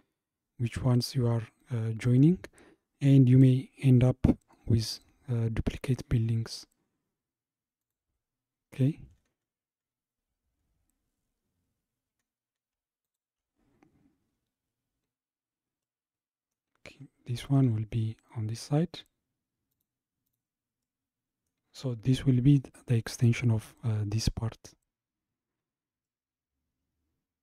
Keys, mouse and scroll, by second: 7.8 click, 8.7-10.7 scroll down 45, 12.0-13.1 scroll down 11, 13.1 shift+click, 14.3-14.9 scroll up 4, 14.9-15.8 scroll down 1, 15.8-17.4 middle drag, 17.4 g, 20.3 click, 20.8-23.9 middle drag, 26.0 scroll down 1, 26.1-27.4 middle drag.